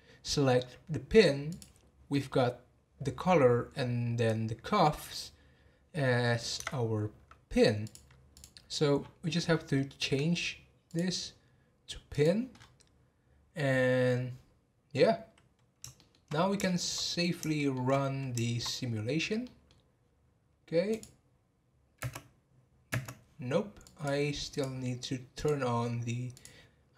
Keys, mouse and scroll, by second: 1.5 click, 2.1-5.1 middle drag, 6.6 Tab, 7.8 click, 8.3 click, 8.9-9.9 scroll down 23, 10.1 scroll up 1, 10.9-12.5 drag, 12.5 scroll up 6, 15.9 shift+middle drag, 16.2-16.7 scroll down 3, 16.7-18.0 shift+middle drag, 18.0-18.9 scroll up 3, 18.9-19.4 scroll down 2, 19.4-20.9 middle drag, 20.9 click, 22.0 space, 22.9 space, 23.8-24.6 drag, 25.3 click, 26.3 click.